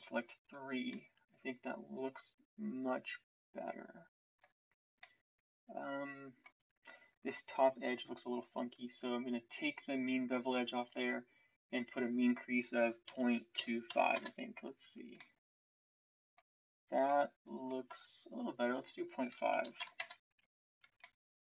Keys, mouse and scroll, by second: 6.6 Tab, 14.8 Tab, 17.8 Tab.